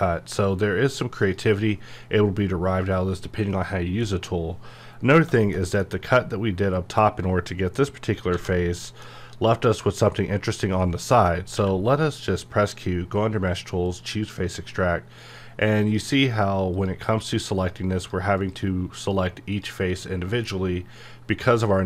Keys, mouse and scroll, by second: 4.0-5.3 middle drag, 8.3 middle click, 11.5 q, 13.9 click.